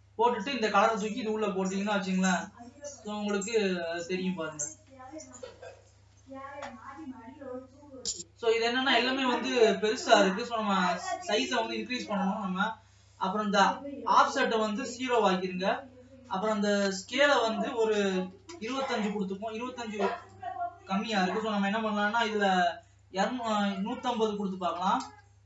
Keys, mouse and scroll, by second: 4.4 Tab, 6.1-6.6 scroll down 2, 6.6 middle click, 7.3-7.9 scroll up 3, 7.9-15.1 middle drag, 15.1-25.4 drag.